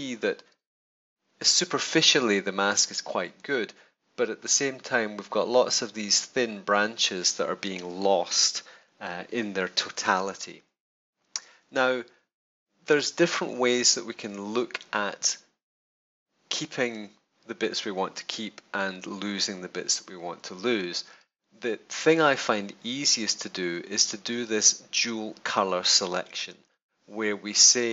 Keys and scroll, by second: 0.6 super+space, 8.7 super+=, 9.7 super+space.